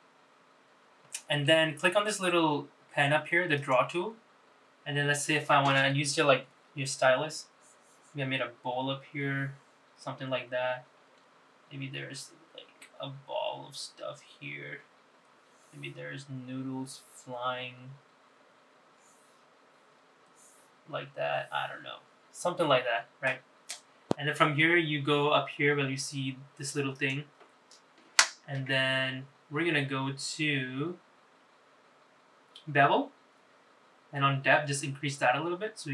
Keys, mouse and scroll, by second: 0.0 n, 3.3 click, 7.4 click, 9.0 click, 11.8-13.0 drag, 13.4 click, 14.1 click, 15.1-18.0 drag, 18.7 click, 20.1 click, 21.0 click, 26.7 click, 29.2 scroll up 2, 31.8 scroll down 2, 33.1-34.5 scroll down 2, 34.5-35.9 drag.